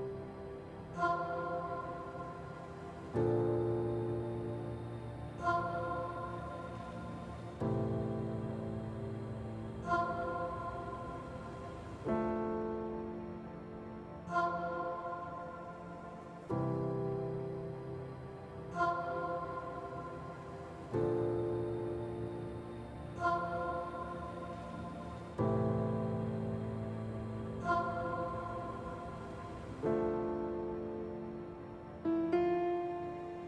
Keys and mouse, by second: 1.5 middle click, 2.9 alt+z, 3.1 middle click, 6.6 click, 8.3-9.4 drag, 9.9 shift+click, 11.5 alt+z, 11.8-13.2 shift+drag, 13.7 x, 17.8 Tab, 18.5 ctrl+a, 19.5 Tab, 20.2 Tab, 20.5 alt+z, 21.4 q, 22.2 click, 22.6 middle click, 23.6 Tab, 25.7 middle click, 27.5-29.2 middle drag, 30.1 middle click, 31.2 middle click, 32.8-33.4 middle drag.